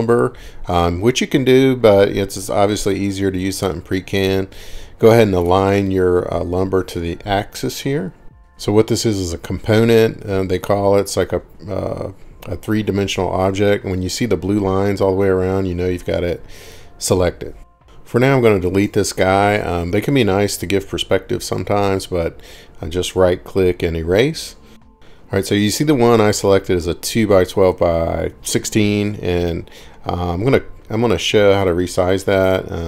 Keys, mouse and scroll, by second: 6.9 click, 10.6-10.9 scroll, 14.8 middle click, 15.1 scroll down 2, 15.9-17.1 scroll down 2, 18.2 click, 18.2 scroll up 4, 19.4 scroll down 4, 19.6 right click, 21.8 click, 22.7-23.3 scroll, 23.5-24.1 scroll down 11, 24.9 middle click, 25.3-25.7 scroll up 17, 25.7-26.5 scroll down 6, 27.7-28.5 middle click, 29.0 right click, 29.7 middle click, 31.5 click.